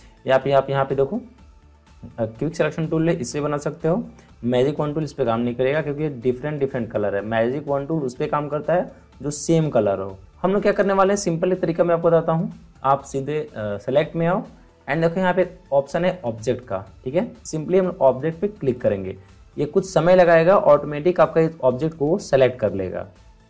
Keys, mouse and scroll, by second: 1.2-10.2 drag, 10.7 click, 13.8 click, 18.6 click.